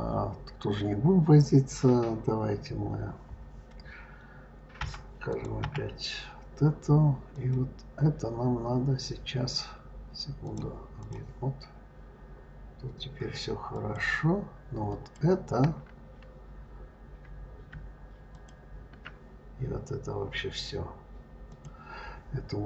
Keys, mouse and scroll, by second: 4.6 KP_Divide, 5.1 click, 5.5 KP_Divide, 6.4-6.8 scroll up 3, 7.2 click, 10.3-13.3 drag, 13.6 click, 14.7 click, 18.2 shift+click, 21.3 click.